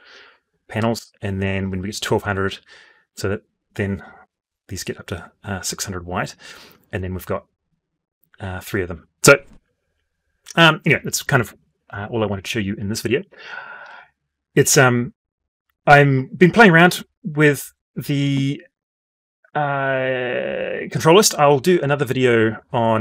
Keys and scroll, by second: 3.9 alt+Tab, 16.2 F12.